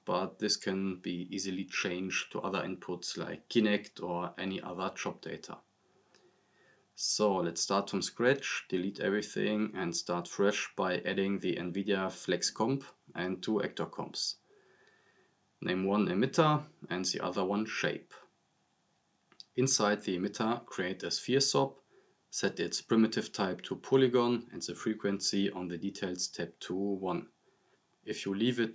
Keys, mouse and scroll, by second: 7.1 click, 7.8 scroll down 1, 8.5-9.4 drag, 11.7-12.5 typing, 13.5 click, 16.8 scroll up 2, 17.0 click, 17.8-20.0 typing, 19.0 click, 21.3 click, 22.8-23.9 typing, 24.2 click.